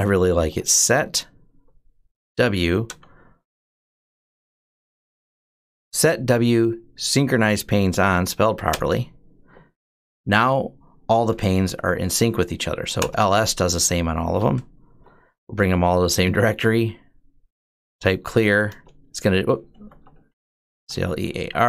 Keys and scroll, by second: 0.0-6.0 typing, 8.5 Return, 11.3-12.2 typing, 12.7 Return, 13.9-18.1 typing, 14.7 Return, 18.5 Return, 19.3-21.6 typing.